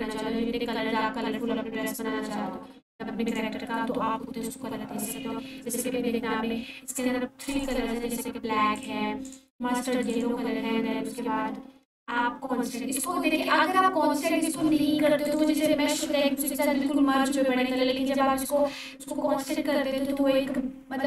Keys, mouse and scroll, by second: 7.5-9.4 drag, 15.2 click.